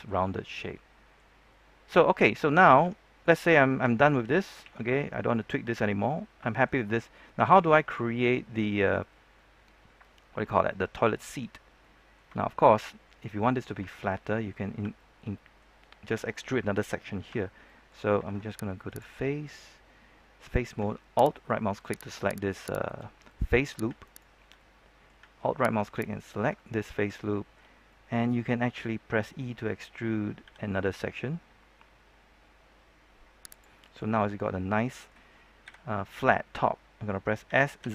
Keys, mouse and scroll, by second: 1.8 Tab, 4.6 ctrl+3, 5.0 middle click, 5.7 Tab, 6.0-11.5 middle drag, 11.5 scroll up 1, 11.7 middle click, 12.3 shift+middle click, 13.8 shift+middle click, 14.9 shift+middle click, 15.8-17.2 scroll down 1, 17.2 Tab, 17.6 middle click, 18.8 ctrl+Tab, 18.8-19.9 drag, 21.3 alt+right click, 22.0 alt+right click, 22.4 alt+right click, 22.8 alt+right click, 23.2 middle click, 24.0 alt+right click, 24.5 middle click, 25.9 alt+right click, 26.5 middle click, 27.1 shift+middle click, 27.8-29.0 middle drag, 30.4 e, 33.4 click, 33.7 middle click, 35.6 KP_3, 37.4 typing.